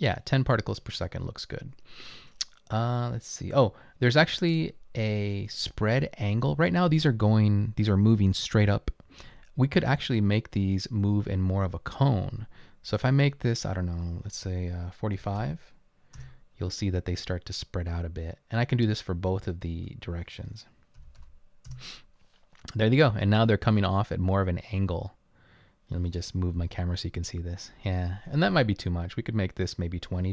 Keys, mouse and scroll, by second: 0.9 typing, 15.0-15.9 typing, 16.6 Return, 19.8 typing, 21.2-21.7 typing, 23.0 typing, 25.6-27.5 typing, 29.7 right click.